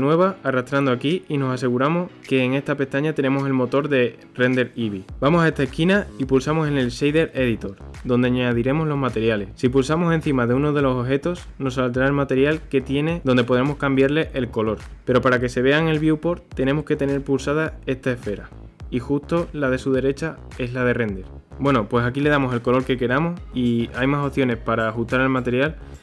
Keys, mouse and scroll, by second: 0.4-2.2 drag, 2.2 shift+middle click, 2.3 click, 5.6-7.8 drag, 7.8-8.4 scroll down 2, 8.4-9.9 shift+middle drag, 9.9 scroll down 1, 10.0 click, 11.8 scroll up 1, 13.7 click, 15.8 click, 17.4-17.8 scroll down 1, 18.7 click, 19.6 Delete, 20.3 scroll up 1, 21.3 middle click, 21.4 click.